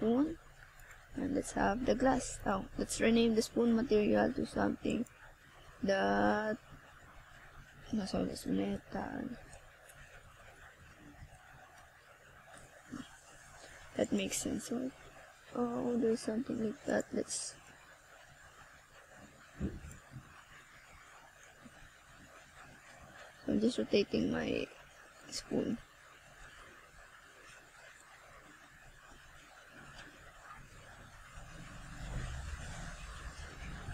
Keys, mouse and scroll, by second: 3.8 click, 7.1 click, 7.9 scroll down 1, 11.9 click, 12.0 click, 17.4 click, 21.4 click, 25.8 scroll down 1, 27.3 click.